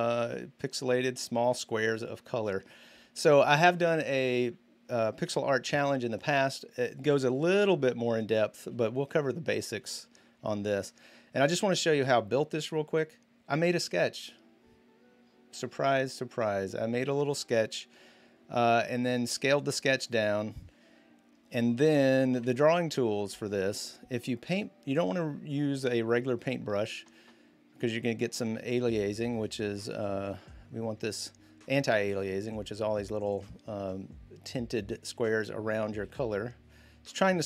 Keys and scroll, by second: 3.4 space, 5.0 v, 22.1 b, 23.6-24.6 typing, 29.4 z, 35.8 z.